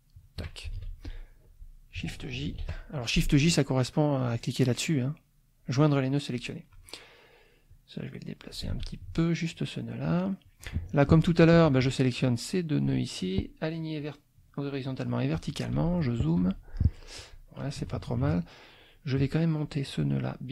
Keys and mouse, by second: 0.1 shift+click, 0.7 shift+F2, 1.0 shift+click, 2.5 shift+j, 6.3 click, 7.7 click, 8.7 ctrl+z, 9.0 ctrl+click, 9.5 ctrl+click, 10.5 middle click, 10.7 click, 11.2 shift+click, 12.2 click, 14.0 click, 14.9 click, 15.3 click, 15.7 z, 15.9 click, 16.4 F2, 17.8 KP_Subtract, 19.1 click, 19.8-20.5 drag.